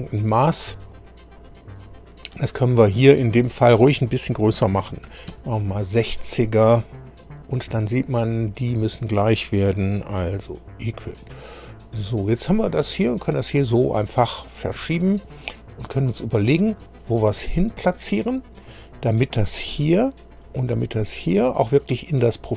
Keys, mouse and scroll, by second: 1.4 click, 4.9 KP_6, 5.0 KP_0, 5.3 Return, 7.5 click, 8.6 click, 10.4 e, 12.2-18.8 drag.